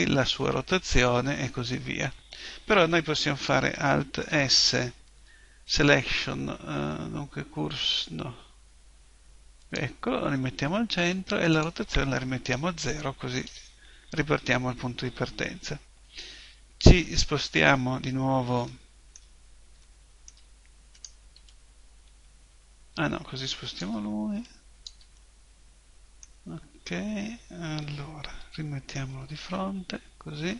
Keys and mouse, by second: 4.3 shift+s, 11.5 click, 24.4 click, 25.2 middle click, 28.4 KP_1.